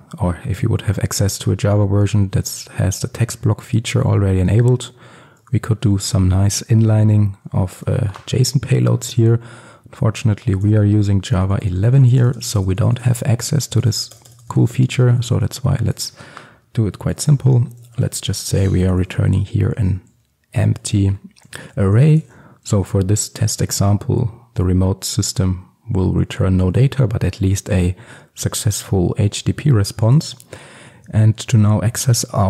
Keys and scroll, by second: 22.2 ctrl+alt+super+l.